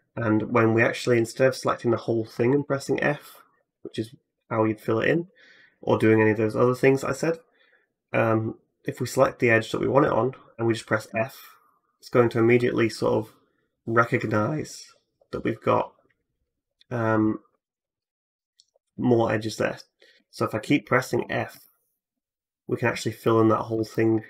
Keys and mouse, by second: 1.5-21.3 alt+drag, 1.5 alt+middle click, 1.5 alt+right click, 2.3 f, 4.9 ctrl+z, 5.5 middle click, 5.5 right click, 10.9 f, 19.9-21.8 typing, 23.5-24.2 shift+drag.